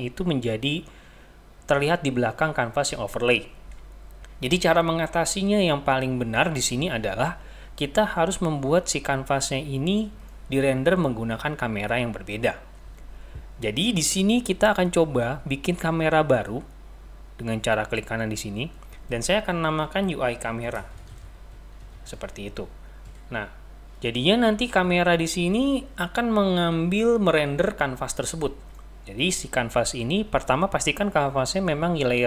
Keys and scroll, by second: 20.2-23.6 typing.